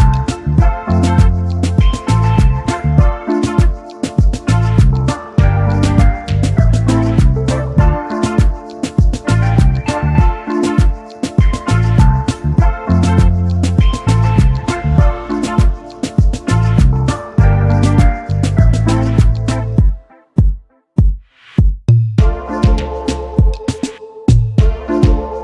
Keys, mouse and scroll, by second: 0.7 alt+scroll up 1, 6.9 alt+scroll up 1, 9.6 alt+scroll down 1, 10.7 alt+scroll down 1, 10.9 space, 21.6 double click.